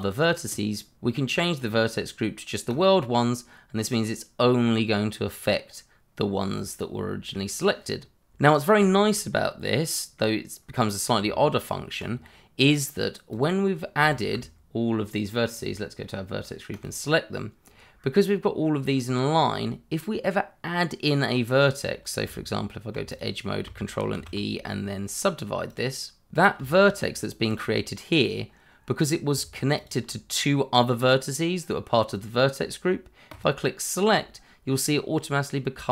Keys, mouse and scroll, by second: 1.5 click, 3.7-4.0 scroll down 1, 4.0 middle click, 5.8-6.3 scroll down 1, 8.4 scroll up 1, 8.8 shift+middle click, 9.3 scroll up 1, 9.8 middle click, 11.2 Tab, 13.3 click, 14.1 alt+click, 17.6 scroll down 1, 18.9 scroll up 1, 22.2 Tab, 23.1 click, 24.1 ctrl+e, 25.6 click, 26.3 Tab, 27.6 click, 29.7 shift+click, 33.3 click.